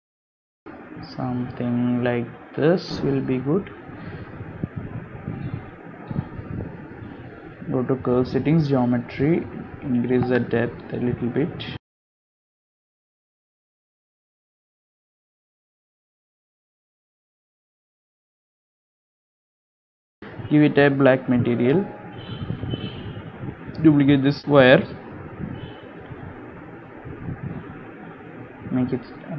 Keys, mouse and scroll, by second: 0.5 g, 2.2 click, 2.4 g, 3.3 click, 3.5 g, 4.2 Tab, 4.5 middle click, 5.2 scroll up 1, 5.5 g, 6.9 middle click, 7.4 g, 8.7 click, 10.7 click, 11.9 shift+click, 12.1 shift+click, 13.9 middle click, 14.4 scroll up 4, 14.9 shift+middle click, 16.2 shift+middle click, 16.9 scroll down 1, 17.3 scroll up 1, 17.6 shift+middle click, 18.1 scroll down 2, 18.6 KP_7, 19.3 scroll down 2, 19.8 shift+middle click, 20.8-21.2 scroll up 3, 21.4 click, 22.0 click, 22.7 click, 24.7 shift+middle click, 25.2-26.0 scroll up 4, 25.5 shift+middle click, 26.4 shift+d, 27.4 r, 29.0 shift+d.